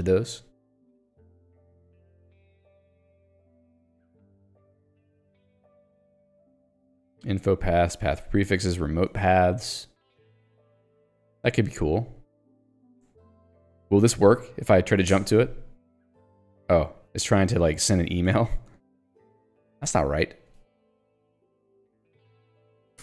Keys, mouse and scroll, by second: 0.4 click, 0.9 j, 5.2 ctrl+d, 9.3 j, 13.5 click, 15.3 alt+Return, 17.5 Escape, 18.9 ctrl+g, 19.8 Return, 20.7 Escape, 21.1 h, 22.8 l.